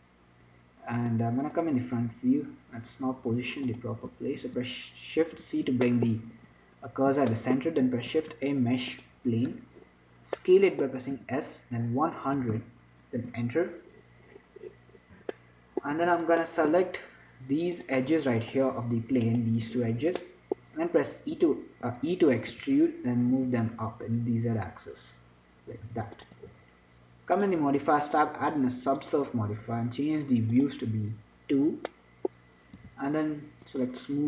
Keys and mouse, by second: 1.9-3.5 drag, 3.5-5.4 middle drag, 3.5 x, 5.4 shift+c, 6.1 middle click, 8.4 shift+a, 11.4 s, 14.2-16.3 middle drag, 16.3 Tab, 18.0-20.0 drag, 20.0-22.8 middle drag, 21.6 r, 22.8 e, 26.7 Tab, 27.6-32.7 drag, 32.7-33.9 middle drag, 33.1 t, 33.9-34.2 drag.